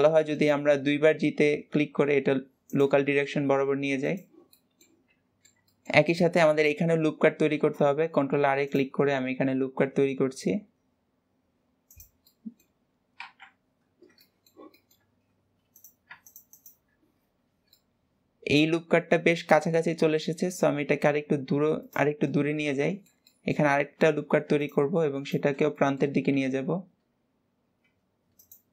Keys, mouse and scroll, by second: 3.1 shift+middle click, 4.0 click, 4.5 middle click, 5.1 g, 5.2-6.9 middle drag, 6.9-7.5 scroll up 1, 7.5 ctrl+r, 12.3-13.3 middle drag, 13.3 KP_Decimal, 13.8-14.1 scroll up 5, 14.2 shift+middle click, 15.1-15.7 scroll up 1, 15.7 click, 16.3 alt+shift+click, 16.5 alt+shift+click, 17.5 scroll down 1, 17.7-20.0 middle drag, 20.0 g, 22.3-24.2 middle drag, 24.2 ctrl+r, 25.5 scroll down 1, 25.7 shift+middle click, 26.3 g.